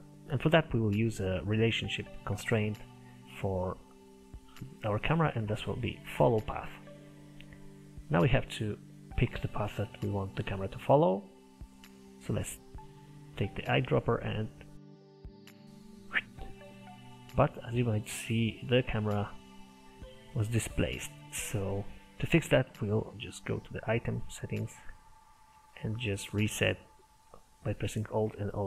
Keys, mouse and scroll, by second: 11.6 click, 15.2 click, 15.5 scroll down 3, 15.6 middle click, 16.6-17.0 scroll up 1, 17.0-20.0 shift+middle drag, 20.0-20.8 scroll up 1, 20.8-21.3 scroll down 1, 21.3 middle click, 22.2-23.3 drag, 28.1-28.6 alt+drag.